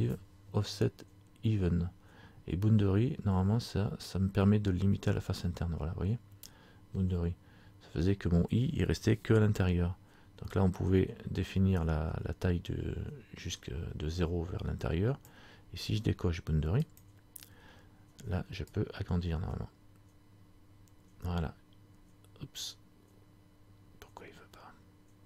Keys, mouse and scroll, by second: 10.6 click, 17.1 click.